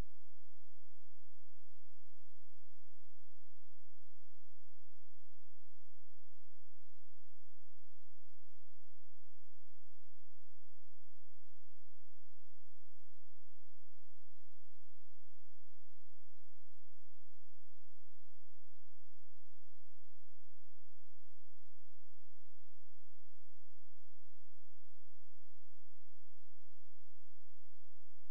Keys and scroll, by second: 6.5 space, 18.9 ctrl+z, 24.6 ctrl+s.